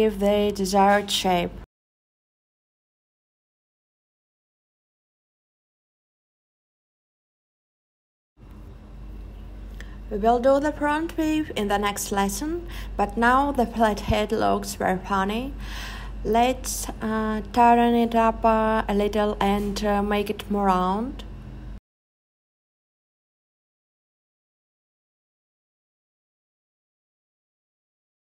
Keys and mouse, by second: 1.0 click, 5.0 click, 5.8 click, 6.5 click, 14.2 click, 15.0 click, 15.7-18.1 drag, 24.2 click, 25.0 click, 26.0-27.7 drag.